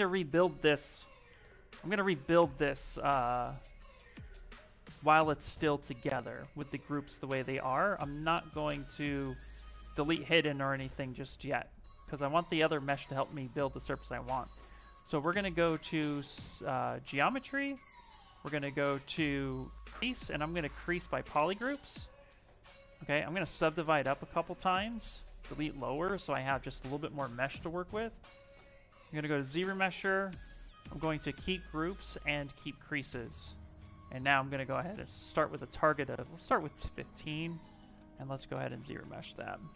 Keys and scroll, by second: 23.4 ctrl+d, 23.9 ctrl+d.